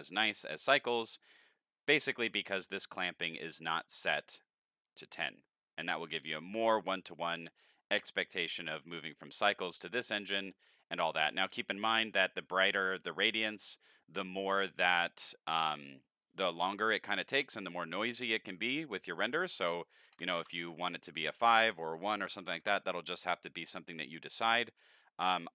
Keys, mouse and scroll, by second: 0.3 scroll up 2, 0.5-1.1 middle drag, 11.6 middle click, 19.3 click, 21.5 click, 24.1 middle click, 25.3 click.